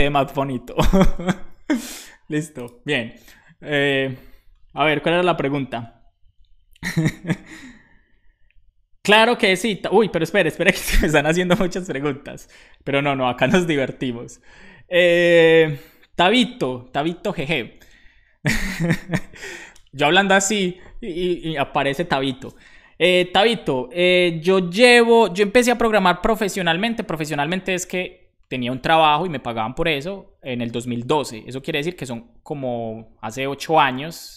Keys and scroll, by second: 0.8 alt+shift+f, 1.4 super+s.